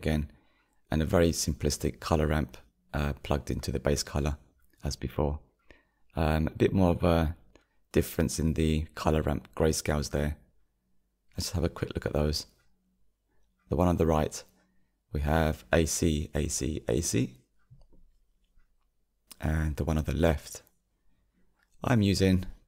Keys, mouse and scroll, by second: 0.8 click, 6.5 click, 13.2 click, 14.9-15.5 drag, 18.9 click, 21.7-22.6 drag.